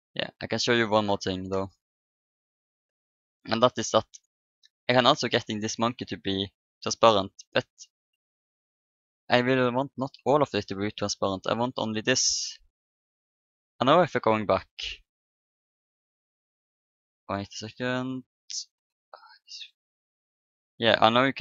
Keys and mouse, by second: 2.5-4.0 middle drag, 4.0-5.6 drag, 4.0 right click, 5.4 right click, 5.6-7.5 middle drag, 8.5-11.6 drag, 11.6-13.4 middle drag, 14.6-16.7 drag, 16.5-18.7 middle drag, 21.2-21.4 middle drag.